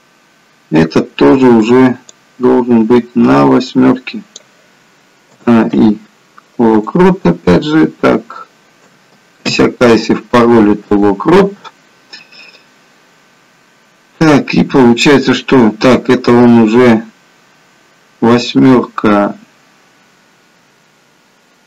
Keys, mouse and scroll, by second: 2.2 click, 5.8 a, 5.9 i, 9.5 a, 9.5 i, 12.8 click.